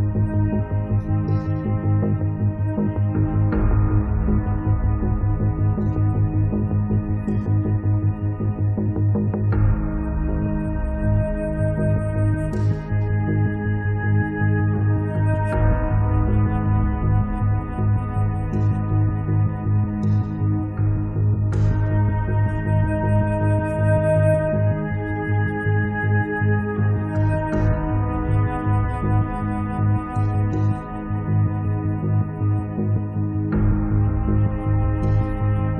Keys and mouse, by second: 0.4-3.4 drag, 0.4 right click, 1.5 middle click, 1.5 right click, 3.8-5.2 drag, 5.3 middle click, 5.6-6.9 drag, 5.8 f, 7.0-10.4 drag, 7.2-9.4 middle drag, 7.2 right click, 9.8 middle click, 9.8 right click, 10.5 click, 11.1 middle click, 12.1-14.4 drag, 12.1-13.2 right drag, 14.7-17.0 drag, 17.1 middle click, 17.3-20.0 drag, 18.8-19.9 middle drag, 20.0 click, 20.4 click, 21.3 middle click, 21.4-23.0 drag, 22.8 middle click, 23.1-26.2 middle drag, 24.3-29.3 drag, 24.3-26.8 right drag, 27.1 right click, 29.3-31.0 middle drag, 31.0-32.8 drag, 31.5 middle click, 31.5 right click, 32.7 middle click, 32.7 right click, 32.9-35.4 middle drag, 33.1 click, 33.1 right click, 35.0 click.